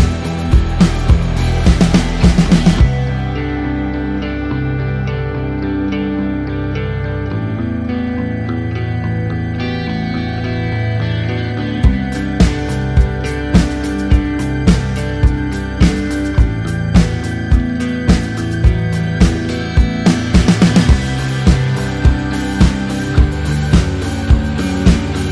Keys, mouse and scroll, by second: 0.7-2.8 typing, 4.8 typing, 4.9 Return, 6.0 click, 10.9 click, 10.9 KP_5, 11.9 KP_0, 12.2 KP_1, 12.6 KP_Enter, 13.3-14.0 typing, 14.1 click, 15.0 ctrl+d, 16.1 ctrl+a, 16.7 click, 17.0 ctrl+d, 17.7 shift+Up, 20.6 [, 21.2 click, 22.4 Up, 23.9 click.